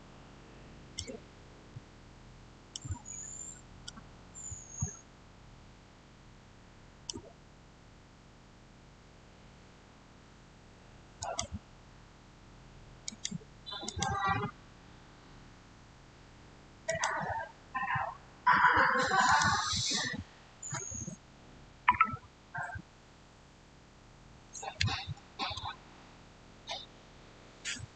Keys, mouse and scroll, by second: 3.1-3.7 scroll down 1, 3.7-9.6 shift+middle drag, 11.1 click, 16.7 click, 16.7 click, 19.1 click, 19.1 click.